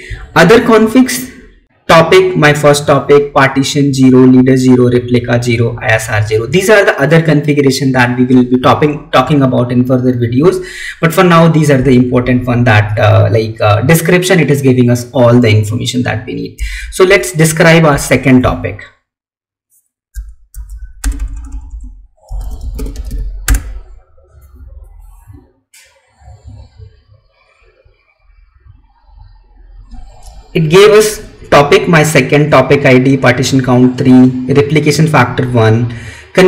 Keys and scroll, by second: 17.2 Left, 17.7 Up, 18.3 Left.